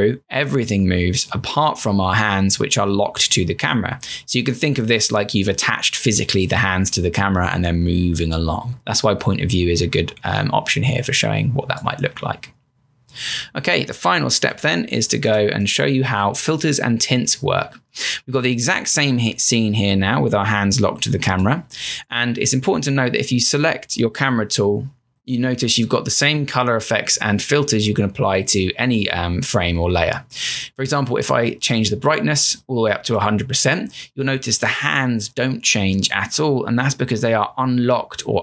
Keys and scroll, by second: 14.5 m, 24.3 c.